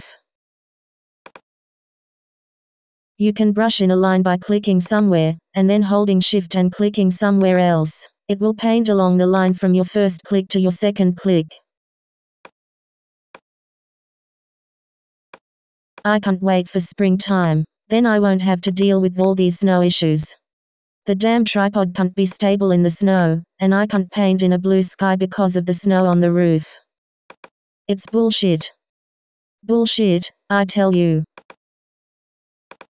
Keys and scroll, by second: 30.0 d, 32.1 super+..